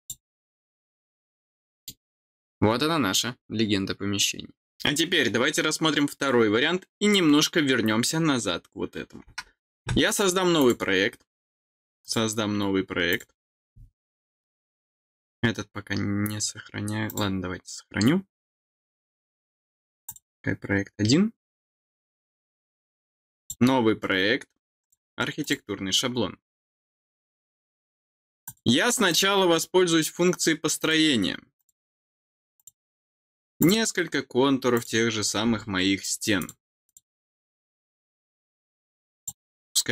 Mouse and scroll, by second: 0.0 click, 1.5 middle click, 10.5 click, 11.9 click, 13.0 click, 17.0 click, 20.0 click, 23.3 click, 24.7 click, 25.3 click, 28.3 click, 29.0 click, 30.7 click, 31.5 click, 32.5 click, 33.5 click, 34.6 click, 36.3 click, 36.8 click, 39.1 click.